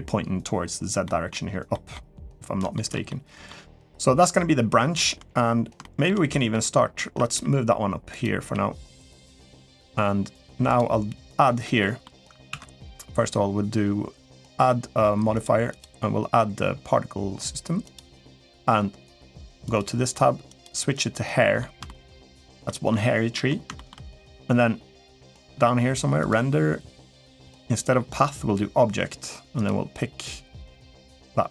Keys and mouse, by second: 0.8 middle drag, 1.5 middle click, 2.5 shift+middle drag, 2.9-3.3 middle drag, 3.7-4.2 middle drag, 5.6 shift+middle drag, 6.1 middle drag, 7.1 g, 8.3 g, 10.4 click, 11.6 middle click, 12.3 ctrl+s, 15.5-17.7 drag, 19.4 click, 20.3 click, 21.0-21.4 middle drag, 21.6 shift+middle drag, 22.4 middle click, 23.1 middle click, 23.5 shift+middle click, 26.0 click, 27.2-28.0 drag, 29.4 click.